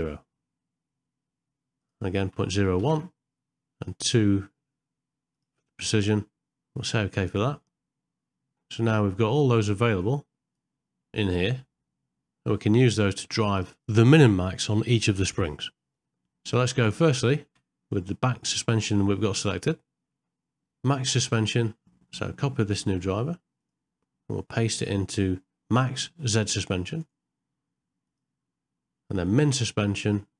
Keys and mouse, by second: 10.1 click, 16.1 middle click, 22.0-23.7 right drag, 27.1-28.2 right drag.